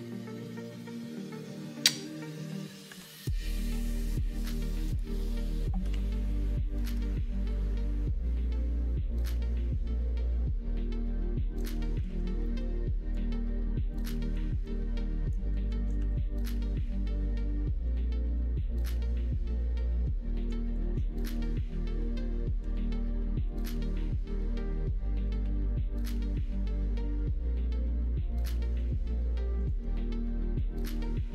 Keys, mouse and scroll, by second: 2.9 ctrl+r, 5.9 2, 6.9 g, 12.4 middle click, 13.0-14.1 drag, 14.1 middle click, 14.6 click, 15.1 middle click, 15.9 ctrl+r, 17.2 middle click, 17.9 ctrl+r, 19.2 click, 19.8 middle click, 20.7 click, 21.0 middle click, 22.0 middle click, 22.5 e, 23.6 e, 25.4 e, 26.5 e, 28.3 middle click, 28.7 click, 30.5 e.